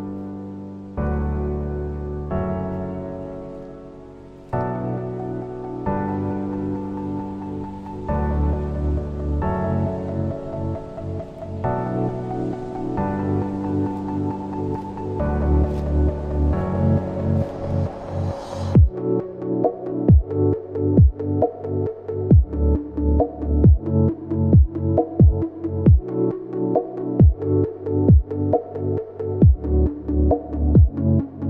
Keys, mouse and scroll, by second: 2.8 double click.